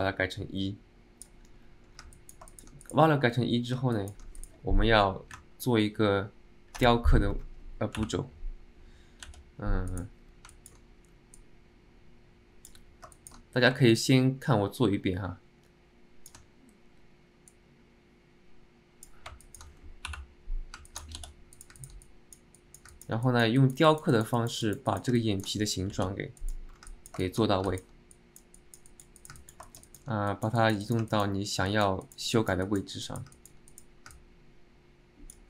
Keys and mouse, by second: 0.1-1.4 drag, 2.3 alt+middle click, 2.6 alt+shift+middle drag, 4.0 alt+shift+middle click, 4.4 click, 10.6 alt+middle click, 11.6-12.9 drag, 13.2 alt+shift+middle click, 14.1-16.5 ctrl+shift+drag, 17.7-19.3 drag, 19.6 shift+middle click, 21.0 middle click, 21.9 middle click, 22.2 click, 22.7 click, 23.0 alt+middle click, 23.4 click, 23.7 middle click, 24.0 middle click, 24.3 click, 24.5 click, 24.8 click, 25.0 click, 25.3 middle click, 27.0 alt+middle click, 27.3 shift+middle click, 27.8 alt+middle click, 28.2 middle click, 28.7 click, 29.0 click, 29.3 alt+click, 29.5 middle click, 29.8 shift+middle click, 30.0 middle click, 30.4 click, 30.9 click, 31.2 alt+middle click, 31.8 click, 32.1 click, 32.5 click, 33.1 click, 33.5 middle click, 33.8 middle click, 34.2-35.4 alt+middle drag.